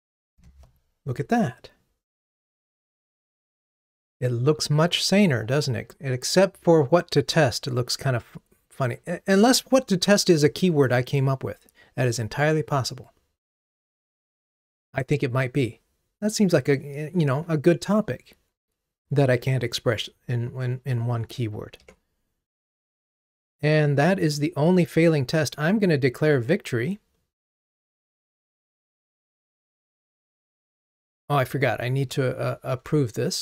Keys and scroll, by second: 22.0 ctrl+Tab, 29.2 ctrl+Tab.